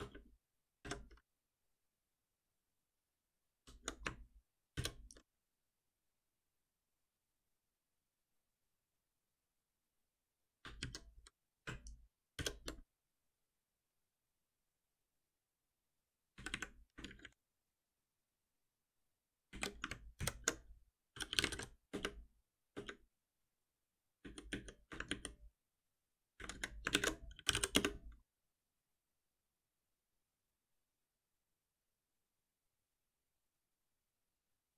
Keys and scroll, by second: 3.5 ctrl+y, 4.7 shift+F10, 10.8 ctrl+y, 11.3 ctrl+s, 12.3 shift+F10, 20.2 ctrl+alt+m, 25.1 ctrl+shift+Down, 26.9 ctrl+shift+Right, 29.1 Return.